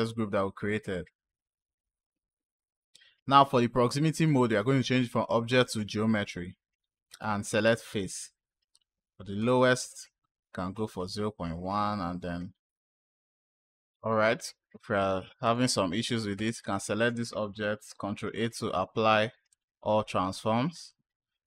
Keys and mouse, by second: 4.0-5.6 drag, 6.9 click, 9.3 click, 12.8-13.8 drag, 14.9-15.4 drag, 16.2 click, 17.7 ctrl+a.